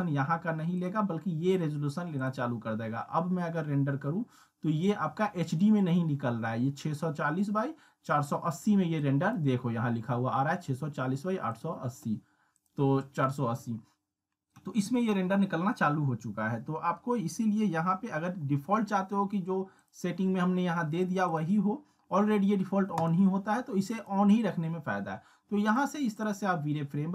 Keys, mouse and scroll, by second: 0.8 click, 4.8-5.7 drag, 9.0-9.6 drag, 19.8 click, 25.7 click.